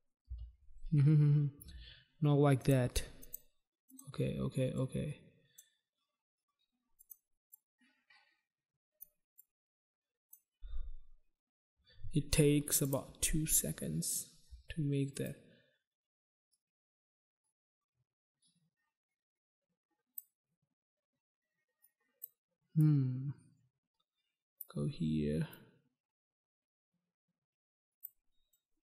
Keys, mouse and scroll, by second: 0.3 space, 2.6 click, 2.7 click, 3.2 click, 3.4 click, 3.9 click, 4.1 click, 4.8 click, 7.0 click, 7.1 click, 7.6 click, 9.3 click, 12.8 click, 12.9 click, 15.2 click, 15.3 click, 16.6 click, 21.9 click, 22.8 click, 25.5 click, 28.5 click.